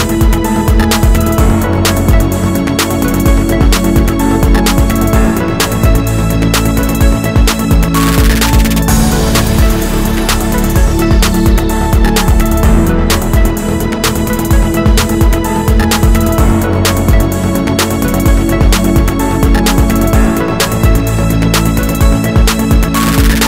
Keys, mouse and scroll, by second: 0.7 shift+click, 1.0 2, 1.2 click, 1.7 ctrl+x, 2.0 3, 2.1 click, 2.9 i, 5.2 click, 5.3-6.7 middle drag, 5.5 e, 6.7 click, 6.8-12.4 middle drag, 12.4 click, 12.6-18.1 middle drag, 17.3 shift+d, 17.6 Return, 18.1 click, 18.4 Tab, 19.0 KP_1, 19.2 z, 19.4 scroll up 2, 19.6-23.4 shift+middle drag, 19.9 ctrl+r.